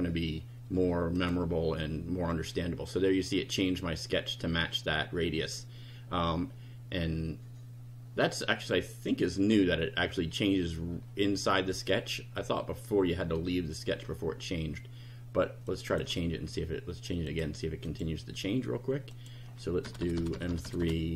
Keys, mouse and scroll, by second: 1.2 click, 2.3-3.0 drag, 15.7 click, 17.3 click, 17.9 click, 19.1 click, 19.9 BackSpace.